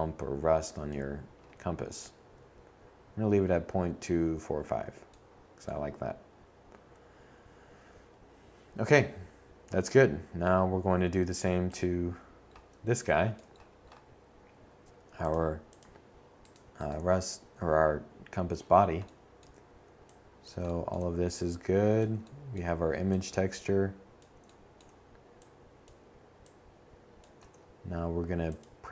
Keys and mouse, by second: 19.0 click, 20.8 click, 23.1 click, 26.8 shift+d.